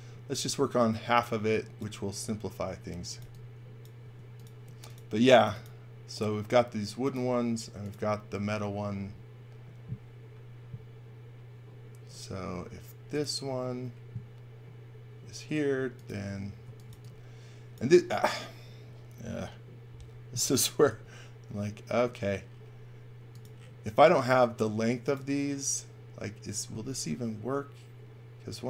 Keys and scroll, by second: 2.7-4.0 typing, 16.3-17.3 typing, 20.8 r.